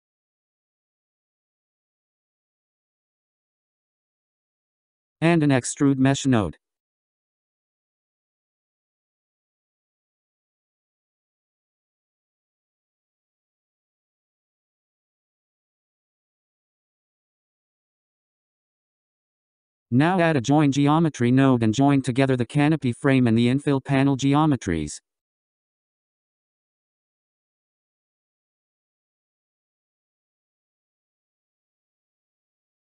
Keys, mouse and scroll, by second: 5.3 shift+a, 10.1-11.5 drag, 11.5-12.0 scroll up 8, 13.2 click, 15.7-17.3 drag, 18.8-20.0 drag, 20.0-21.0 scroll down 7, 21.0 scroll up 4, 22.7 shift+a, 30.1-32.9 drag.